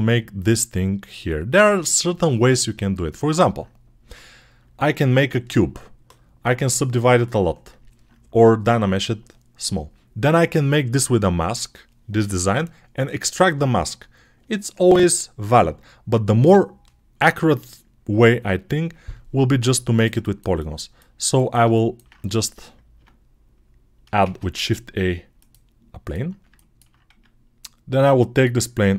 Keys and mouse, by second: 19.8-21.9 ctrl+alt+drag, 22.8 Tab, 24.1 shift+a, 27.0 Tab.